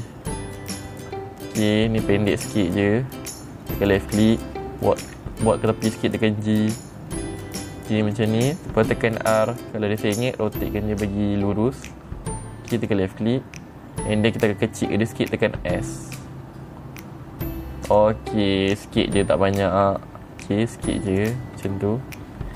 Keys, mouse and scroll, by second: 4.2 click, 5.4 g, 8.5 click, 9.7 r, 13.2 click, 18.3 click, 19.2 middle click, 19.2-19.5 scroll down 2, 20.9 s, 21.6 click, 22.1 middle click, 22.2 scroll up 1.